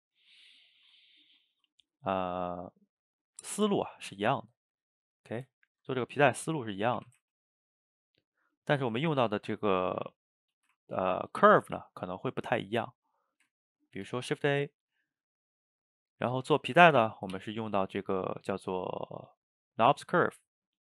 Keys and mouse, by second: 0.8-4.6 ctrl+shift+middle drag, 6.3 click, 7.0 r, 8.2-8.7 middle drag, 8.7 a, 8.8 a, 9.2 shift+right click, 9.4-13.3 ctrl+middle drag, 13.3 shift+right click, 13.6-14.2 ctrl+middle drag, 14.2 shift+a.